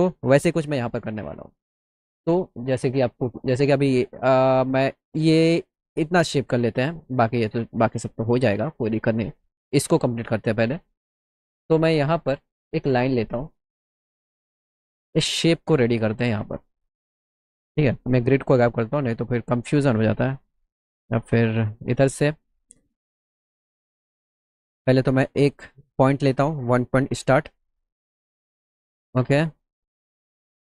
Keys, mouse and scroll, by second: 13.8 click, 15.5 middle click, 16.4 middle click, 16.5-17.0 scroll, 18.3 g, 18.8 middle click, 25.6 click.